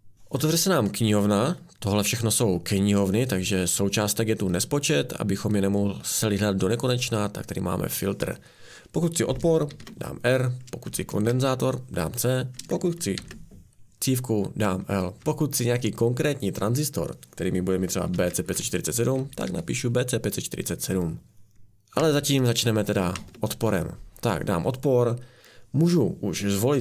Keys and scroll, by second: 1.0 BackSpace, 9.7 r, 10.9 BackSpace, 11.3 c, 12.6 BackSpace, 13.2 l, 14.8-15.2 typing, 17.9-20.0 typing, 22.0-22.7 BackSpace.